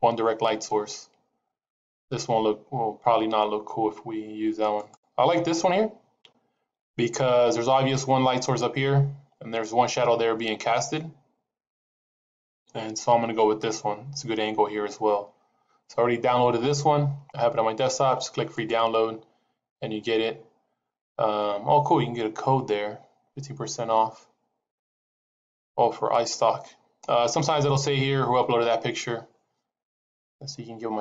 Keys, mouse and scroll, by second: 19.9 middle click.